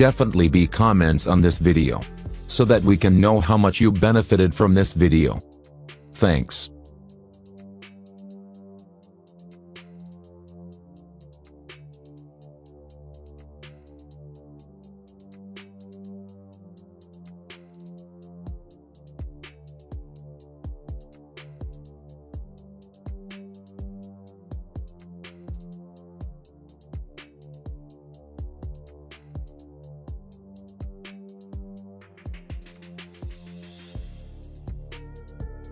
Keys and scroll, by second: 3.2 F3, 5.5 ctrl+g, 16.7 F9, 20.1 F9.